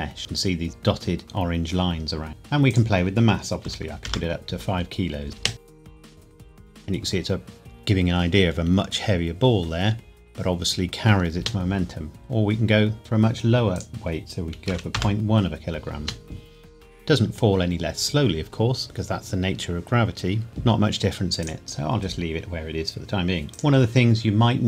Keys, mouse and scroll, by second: 0.7-1.2 scroll up 1, 2.0 scroll down 1, 2.7 click, 3.6 KP_5, 4.0 KP_Enter, 4.9-5.3 scroll down 1, 5.3 middle click, 5.3 space, 11.3 space, 13.0 click, 14.6 KP_Decimal, 14.9 KP_Enter, 15.9 space, 20.5 space, 21.4 click.